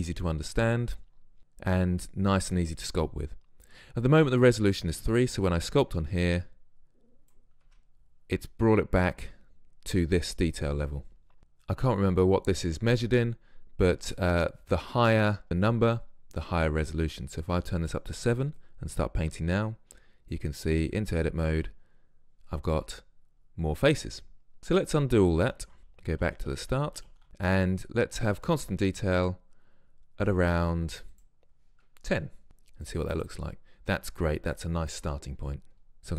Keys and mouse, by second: 5.2-6.0 drag, 7.8 Tab, 11.4 Tab, 16.9-20.2 drag, 20.7 Tab, 24.6 Tab, 25.0 ctrl+z, 25.5 ctrl+z, 26.2 ctrl+z, 26.5 ctrl+z, 26.7 ctrl+z, 27.0-27.3 ctrl+z, 31.2-36.1 drag.